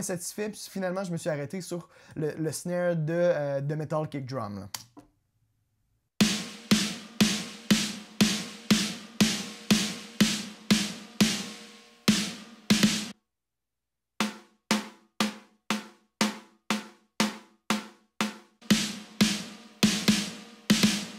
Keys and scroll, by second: 5.2 space.